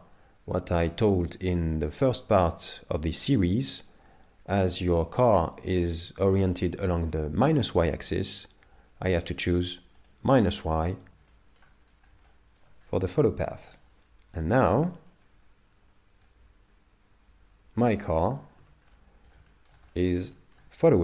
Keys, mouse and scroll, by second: 1.7 shift+middle click, 10.0 click, 11.3 shift+middle click, 11.8 scroll down 4, 12.3 shift+middle click, 12.8 scroll up 4, 13.5 shift+middle click, 15.1 click, 18.6 z, 18.9 middle click, 19.5 shift+middle click, 19.9 middle click, 20.3 shift+middle click.